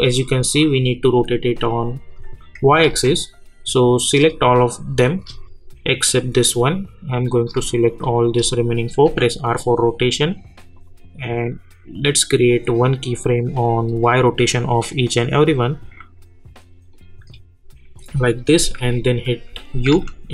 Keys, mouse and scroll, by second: 2.5 ctrl+Num_Lock, 2.8 ctrl+z, 4.0 click, 7.3 click, 9.0 r, 10.0 scroll up 1, 10.7 click, 13.8 scroll down 1, 14.8 click, 15.2 scroll down 1, 16.9 click, 18.8 u.